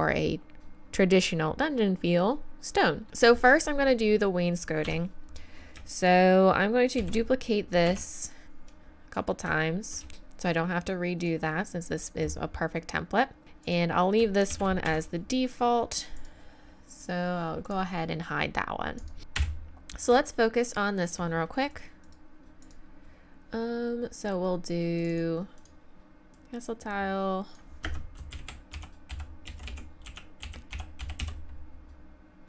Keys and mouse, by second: 4.8 Tab, 5.5 click, 7.0 shift+d, 8.7-10.1 drag, 10.1 shift+d, 10.5-12.2 drag, 13.6 right click, 14.5 shift+d, 16.1-19.0 right drag, 19.2-20.3 right drag, 19.4 KP_1, 22.9-24.2 middle drag, 25.0-27.1 middle drag.